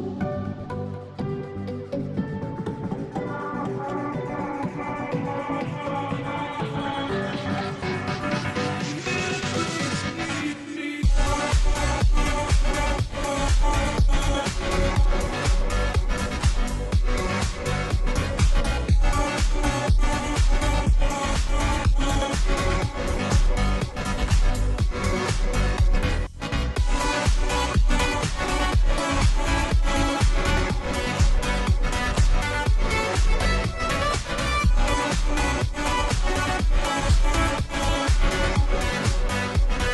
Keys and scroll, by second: 14.4-14.8 space, 18.0 space, 18.5 space, 18.6 space, 18.7-20.0 space, 25.0 [, 25.2 [, 26.4 [, 28.9 ], 29.1 ], 31.5 ], 35.0-35.8 space, 38.7 space, 39.2 space, 39.3-39.9 space.